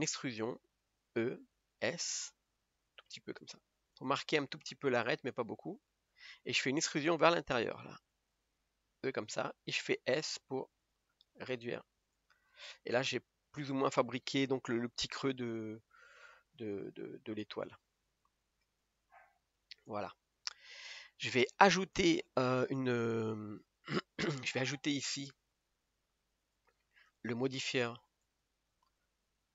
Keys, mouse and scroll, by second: 4.6-5.6 scroll up 1, 5.6 scroll up 1, 5.7 scroll down 2, 5.9-7.7 middle drag, 7.7 e, 9.4 middle click, 10.4 s, 12.6-17.1 middle drag, 17.1 Tab, 17.5-18.1 scroll down 4, 18.1-19.5 middle drag, 19.5-19.9 scroll down 1, 19.9-20.9 middle drag, 20.9-21.9 scroll up 2, 21.9-22.9 scroll up 1, 22.9-23.6 scroll up 1, 23.6 scroll up 2, 23.6 3.